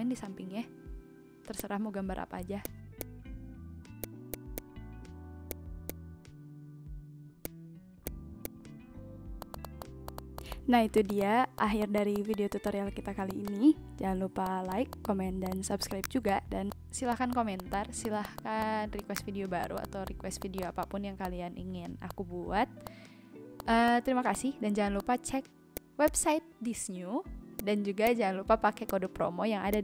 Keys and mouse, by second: 1.3 v, 1.5 click, 2.0 Delete, 2.6 click, 4.0 click, 5.5 click, 7.4 click, 7.7 ctrl+z, 8.0 click, 9.3 ctrl+z, 9.4 click, 9.7 ctrl+z, 9.8 click, 10.0 click, 10.3 ctrl+z, 10.3 click, 10.6 ctrl+z, 10.9 click, 11.4 ctrl+z, 11.5 click, 11.8 click, 12.1 click, 12.2 ctrl+z, 12.3 click, 13.1 ctrl+z, 13.3 click, 13.4 click, 13.7 v, 14.0 v, 14.4 click, 14.9 click, 15.2 a, 15.4 click, 15.8 click, 15.9 a, 16.0 click, 16.7 click, 17.0 v, 17.1 click, 17.5 click, 18.0 click, 18.7 a, 18.9 click, 19.4 shift+click, 19.6 click, 20.0 click, 20.4 click, 21.0-24.0 typing, 21.2 click, 22.1 click, 22.2 Left, 22.8 click, 23.6 click, 23.7 Return, 23.8 click, 25.0 click, 25.7 click, 27.1 ctrl+g, 27.5 click, 28.0 click, 28.8 click, 29.7 click.